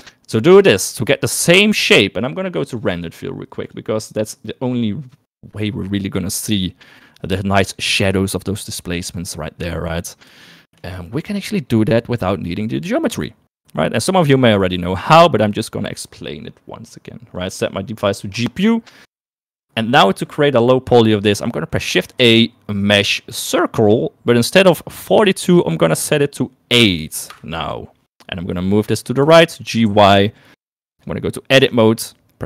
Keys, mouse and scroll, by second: 3.6 click, 4.1 click, 12.0 shift+click, 19.1-20.5 drag, 21.1 click, 23.3 shift+a, 25.1-27.4 drag, 29.2 g, 31.6 Tab.